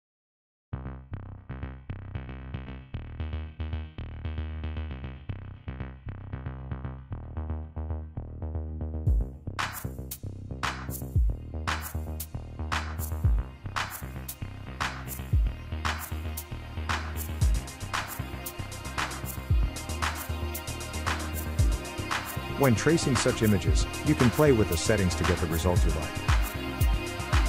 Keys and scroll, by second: 19.7-20.8 typing, 19.8 ctrl+=, 20.4 ctrl+=.